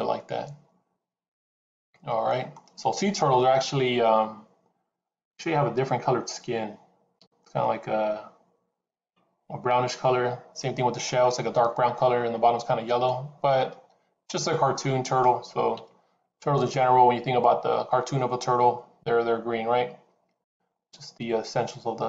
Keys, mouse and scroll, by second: 11.8 middle click, 15.6 KP_7, 16.4 click, 20.5-22.0 scroll down 1.